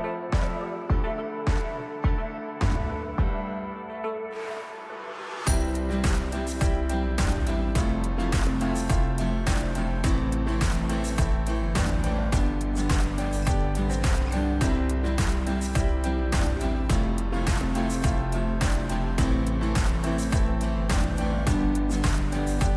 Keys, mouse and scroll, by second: 0.0 click, 5.9 click.